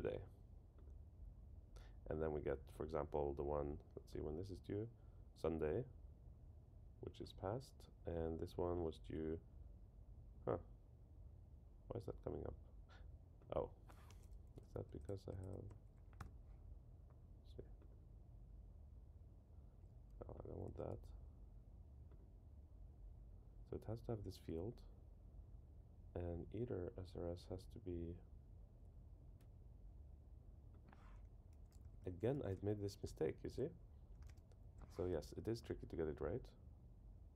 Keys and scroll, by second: 14.8 Left, 15.7 shift+Down, 20.6 super+z, 31.8 alt+Right.